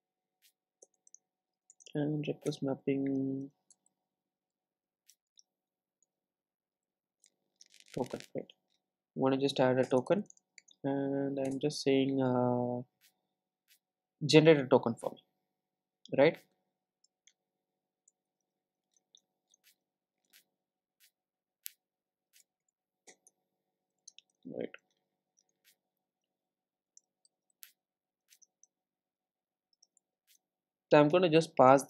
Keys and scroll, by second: 11.5 Return, 23.1 Return.